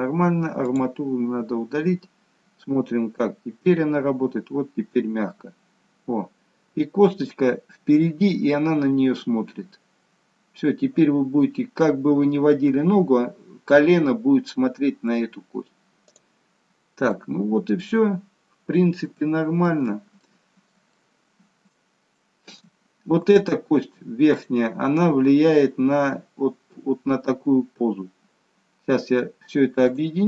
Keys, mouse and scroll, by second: 0.6 click, 1.7-3.0 scroll down 1, 3.1 g, 16.6-17.2 scroll down 1, 17.2 middle click, 17.2-17.9 scroll down 1, 18.1-19.0 scroll up 1, 19.1 shift+middle click, 21.0 shift+middle click, 22.2 shift+middle click, 22.8-24.3 scroll down 3, 24.3 click, 26.7 g.